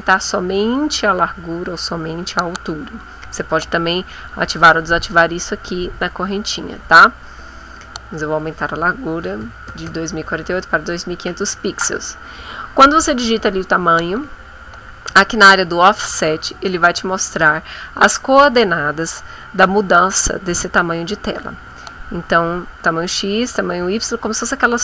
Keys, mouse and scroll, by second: 4.1 click, 4.7 click, 5.4 click, 6.0 click, 7.2 click, 8.1 click, 9.2 KP_2, 9.4 KP_5, 9.7 KP_0.